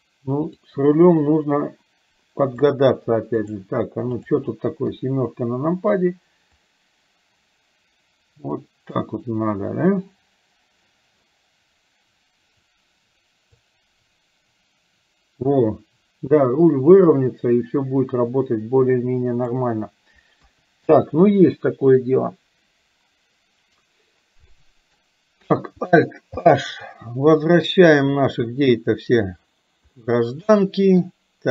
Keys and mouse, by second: 0.5 click, 2.6-3.7 drag, 4.2 click, 4.9 KP_7, 6.6-9.1 drag, 13.9-19.7 drag, 20.5 KP_3, 24.6 middle click, 28.4 alt+h, 30.0-31.1 middle drag.